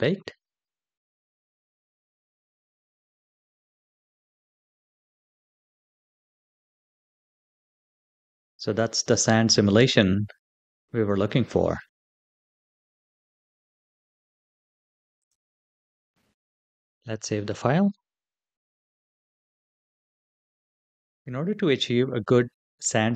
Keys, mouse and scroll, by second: 2.0-2.4 drag, 3.0 click, 15.0 click, 15.5 click, 16.2 click, 18.1-18.7 drag.